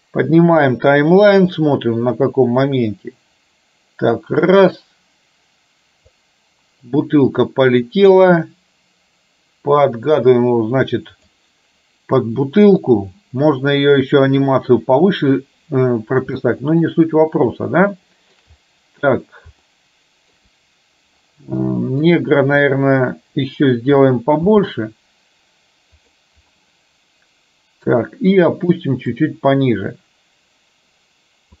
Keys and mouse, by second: 1.7-6.3 drag, 8.6-11.4 drag, 16.6-18.6 shift+middle drag, 19.7 shift+middle click, 21.9 shift+middle click, 24.5 s, 26.6-27.9 middle drag, 29.5-31.6 drag.